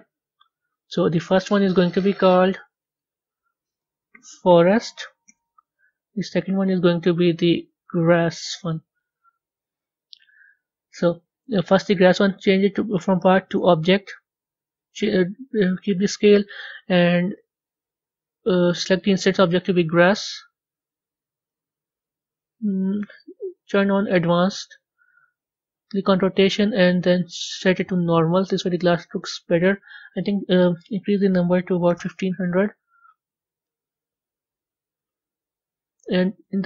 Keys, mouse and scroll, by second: 1.5 click, 2.7-5.3 drag, 5.3 t, 6.3 click, 6.4-8.4 drag, 8.4 s, 13.5-18.9 drag, 20.0 scroll up 4, 20.9 scroll up 1, 21.4-24.2 middle drag, 24.2 click, 26.0 drag, 27.7-31.9 drag, 31.9 KP_0.